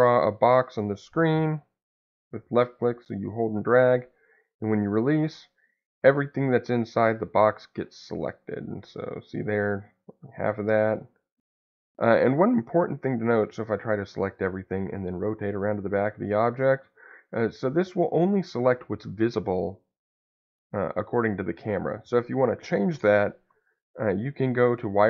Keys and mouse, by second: 6.6 click, 8.2 click, 10.3 click, 13.2 click, 14.9-20.3 middle drag, 24.4 shift+z.